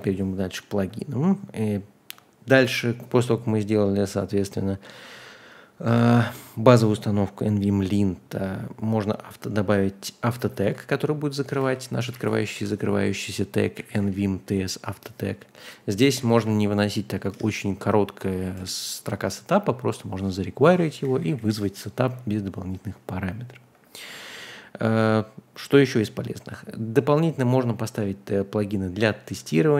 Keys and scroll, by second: 10.6 super+c, 11.6 a, 12.0 Return, 12.5 Escape, 13.3-14.5 typing, 15.8-16.8 typing, 17.3 Return, 18.6 Return, 20.9 j, 21.0 j, 21.2 j, 21.3 j.